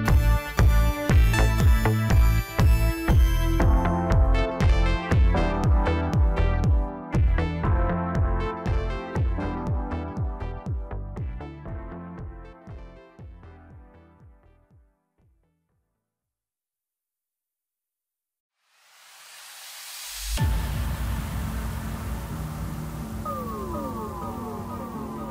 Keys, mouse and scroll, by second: 0.7 s, 2.9-5.9 middle drag, 5.9 click, 6.3-8.5 middle drag, 8.5 drag, 8.9 middle click, 9.7 KP_7, 10.4-11.1 scroll down 1, 11.1 g, 14.8 ctrl+a, 16.8 click, 18.0-19.2 middle drag, 19.2-22.0 drag, 22.0-23.0 middle drag, 23.0 click.